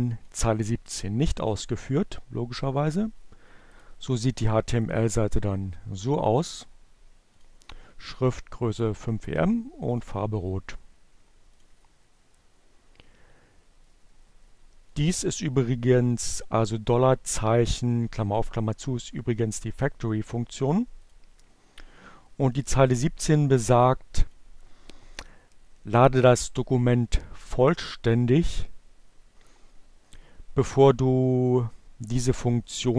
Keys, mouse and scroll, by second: 0.2 click, 2.0 click, 3.1 click, 4.0 click, 6.5 click, 9.1 click, 11.0 click, 12.7-14.1 drag, 19.4 click, 21.2-23.0 drag, 30.2-32.2 drag.